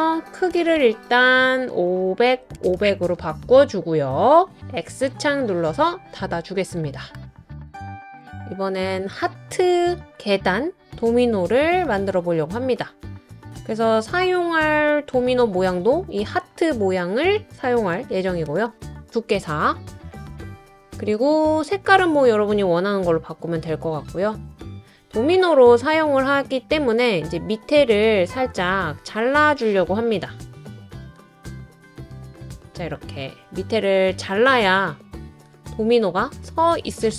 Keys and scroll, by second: 1.0 typing, 2.8 BackSpace, 18.1 4, 18.5 Return, 25.6 typing, 30.4 Up, 30.8 Up, 32.3 Down.